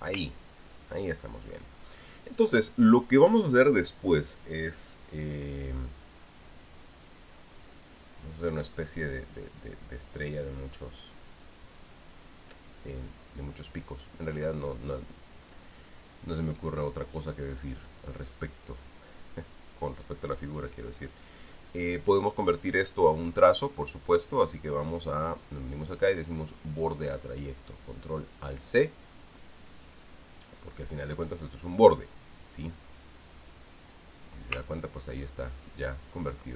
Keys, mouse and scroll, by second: 0.2 ctrl+click, 1.2-2.2 ctrl+scroll down 2, 6.6 click, 8.3 click, 10.1-11.5 drag, 25.4 click, 31.3 click, 34.2 click, 35.5-35.8 ctrl+scroll up 2, 36.4-36.5 ctrl+scroll down 2.